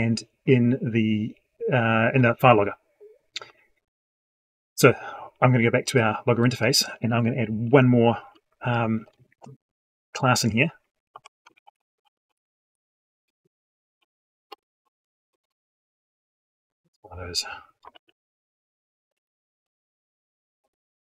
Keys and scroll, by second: 17.8 ctrl+c, 19.1 ctrl+v.